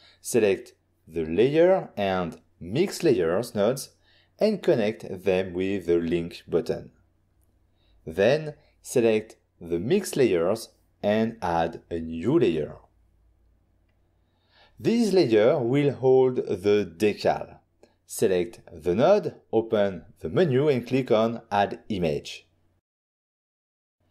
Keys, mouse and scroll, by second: 0.2 click, 0.7 click, 1.2 click, 1.4 click, 1.5 click, 2.0 f, 3.4 click, 3.6 click, 6.2 click, 6.8 shift+click, 8.6 shift+click, 9.2 shift+click, 10.4 click, 10.5 click, 10.8 f, 12.1 click, 13.0 click, 14.4 click, 15.6 middle click, 16.4 middle click, 17.8 f, 23.4 click, 23.9 click.